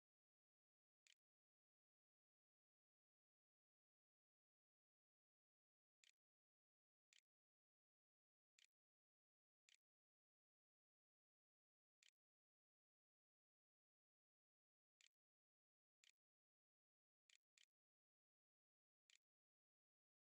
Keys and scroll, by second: 0.6 shift+., 1.9 m, 4.3 j, 5.8-18.6 typing, 19.8-20.2 typing.